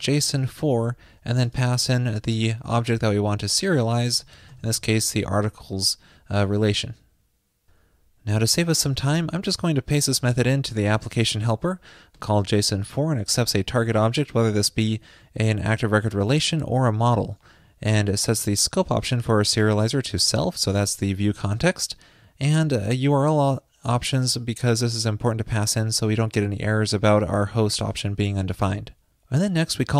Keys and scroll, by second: 5.3 super+s, 11.1 super+v.